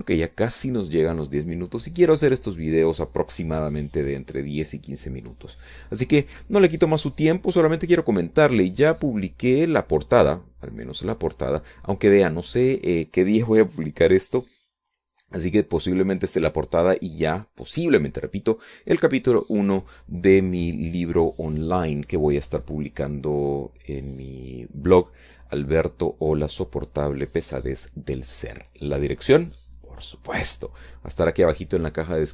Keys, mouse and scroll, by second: 1.3 click, 2.8 click, 11.6 click, 12.6 click, 14.2 click, 14.5-15.5 middle drag, 15.5 click, 30.5 click.